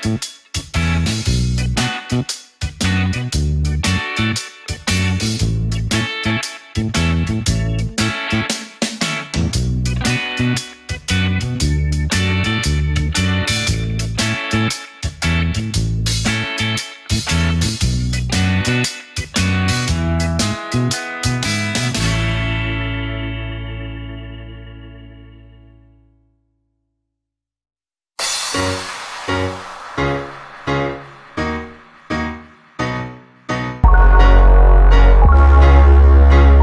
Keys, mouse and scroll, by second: 1.0 shift+click, 2.5 ctrl+KP_3, 3.1-3.9 scroll up 6, 3.9-4.4 scroll up 1, 4.4 click, 4.9-5.8 scroll up 2, 5.8 click, 7.1 ctrl+b, 9.2-9.7 scroll down 1, 10.5 click, 12.1 Tab, 13.2-15.5 drag, 16.0 Tab, 16.7 click, 17.8 shift+click, 19.2 ctrl+KP_3, 19.9-20.8 scroll up 1, 20.8-22.0 drag, 23.3 ctrl+b, 26.2 Tab, 26.4-27.2 scroll down 1, 27.2 click, 28.0 click, 29.3-30.6 drag, 31.2 click, 32.6-33.8 drag, 36.5 scroll up 1.